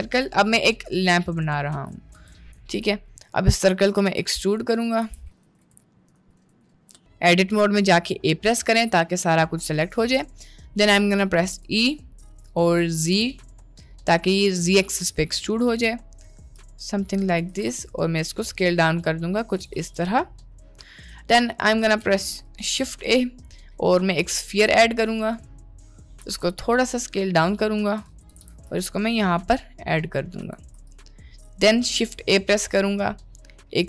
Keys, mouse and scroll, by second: 0.5 drag, 1.1-1.8 shift+middle drag, 2.2 Tab, 2.6 a, 3.0 shift+middle click, 4.2 e, 4.8 g, 5.6 ctrl+z, 5.7 Tab, 5.8 middle click, 6.1 Tab, 6.2 a, 6.4 1, 8.2 middle click, 8.6 a, 9.8 click, 11.5 e, 13.0 g, 17.6 s, 19.9 Tab, 22.0 shift+a, 26.3 s, 28.4 g, 30.9 click, 31.9 shift+a.